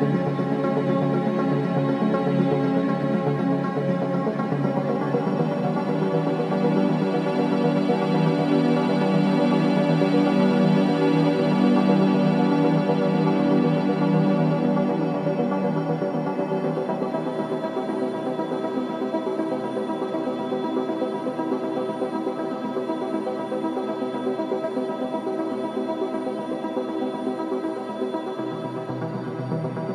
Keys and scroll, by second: 0.6 ], 9.3 4, 18.6 ctrl+d, 18.7 Escape, 22.4 3, 23.0 ], 23.1 ], 25.1 4, 27.1 3.